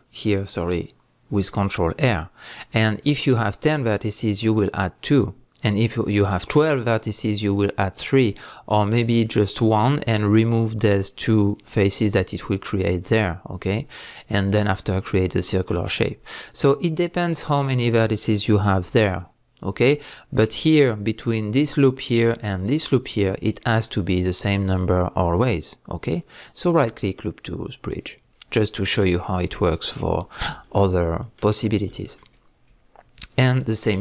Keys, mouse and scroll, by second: 16.5 right click, 17.3-19.1 middle drag, 19.1 alt+click, 19.9-20.6 middle drag, 20.6-21.7 scroll up 2, 21.7-23.0 middle drag, 23.0 alt+shift+click, 26.5-29.0 right drag, 28.3-29.0 scroll down 2, 29.0-33.2 middle drag, 31.7-32.0 scroll up 2, 32.4-33.2 scroll up 2, 33.2 alt+click, 33.9 alt+shift+click.